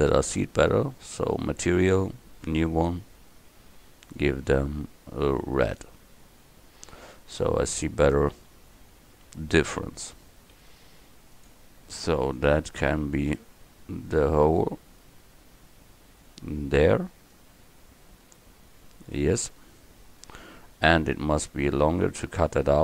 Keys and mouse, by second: 1.4-6.2 drag, 7.0 click, 7.3-8.4 drag, 8.4 KP_1, 10.6 s, 12.4-17.1 drag, 17.4-19.7 drag.